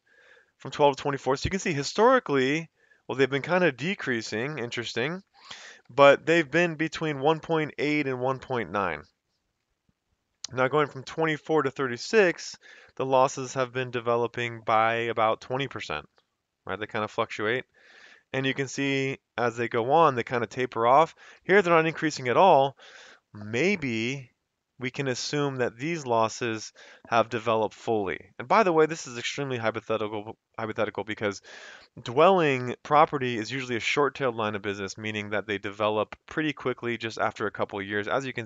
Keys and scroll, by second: 0.0 Down, 0.2 F2, 0.8 Escape, 1.0 Down, 1.2 F2, 1.4 Escape, 1.8 Down, 2.0 Down, 2.3 Down, 2.9 Up, 3.1 Up, 3.3 Up, 3.6 Up, 3.8 Up, 4.1 Down, 4.6 Down, 4.8 Down, 5.0 Down, 5.7 Up, 6.1 Up, 6.3 Up, 6.6 Up, 7.1 Down, 7.4 Down, 8.7 Down, 9.6 Right, 10.4 Up, 10.7 Up, 10.9 Up, 11.2 F2, 13.8 Escape, 15.4 Down, 15.7 Down, 15.9 Down, 16.1 Down, 16.8 Up, 17.0 Up, 17.2 Up, 17.3 Right, 18.4 Right, 18.9 Right, 19.4 Right, 19.8 Up, 21.4 F2, 22.4 Escape.